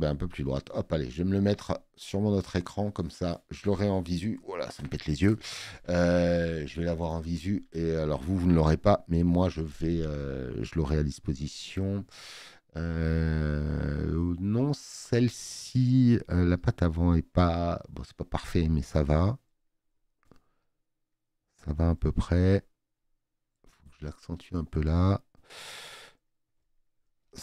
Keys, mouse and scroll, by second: 0.3 click, 0.5 click, 0.7 click.